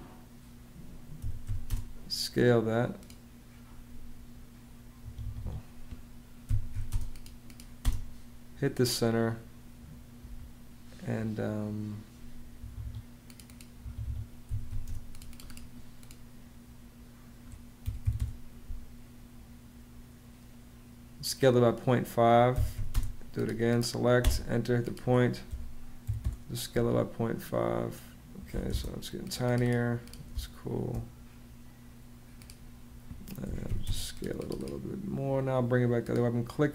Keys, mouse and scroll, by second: 0.9 s, 1.2 c, 1.4 space, 6.0 Home, 6.0-7.0 typing, 12.3 Escape, 13.4 Escape, 14.0-14.9 typing, 17.6 click, 17.8 5, 17.9 Home, 22.0-23.9 typing, 25.2 •, 25.8 5, 25.9 Home, 28.3 m, 28.4 space, 30.0 space, 31.0 space, 32.9-33.9 typing.